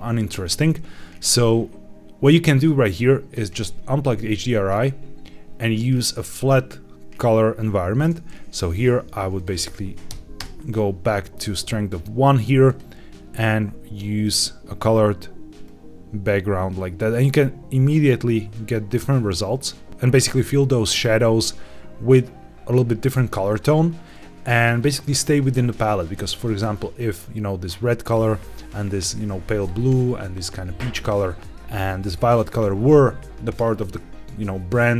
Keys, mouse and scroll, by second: 2.9-3.2 drag, 4.8 scroll down 1, 9.3-10.4 drag, 12.5 click, 14.1 click, 23.3-24.0 scroll down 2, 24.0-25.9 scroll up 1, 25.9 click, 28.0 click, 29.5 click.